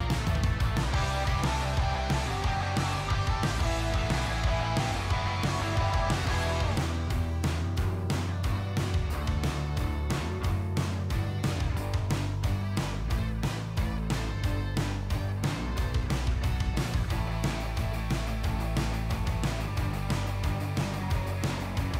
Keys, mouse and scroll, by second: 1.0 ctrl+r, 1.2 click, 2.7 1, 3.6 click, 4.0 typing, 4.9 click, 5.5 typing, 6.3 click, 7.1 g, 7.3 shift+y, 7.9 click, 8.6 g, 8.8 shift+y, 9.7 click, 10.7 typing, 11.8 click, 12.3 ctrl+r, 12.5 click, 13.4-13.8 typing, 14.7 click, 15.4 typing, 16.6 click, 17.4 typing, 18.4 click, 18.8 ctrl+r, 19.0 click, 19.7 typing, 20.8 click, 21.1 g, 21.3 shift+y.